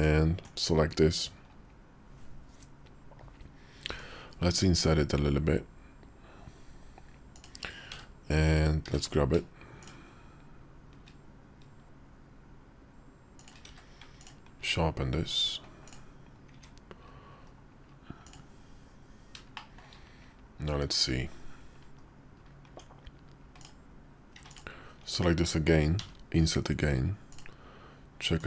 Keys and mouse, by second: 3.7 i, 7.8 w, 8.7 q, 13.5 q, 15.7 click, 17.3 KP_5, 18.1 click, 19.4 middle click, 21.2 KP_5, 21.8 KP_5, 22.6 Tab, 25.9 i, 28.3-28.4 drag.